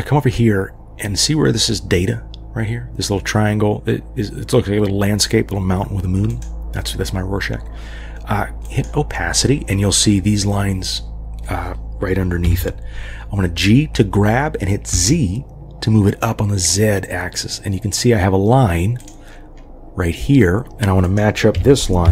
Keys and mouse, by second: 6.3 click, 8.6 click, 12.4 g, 21.5 g.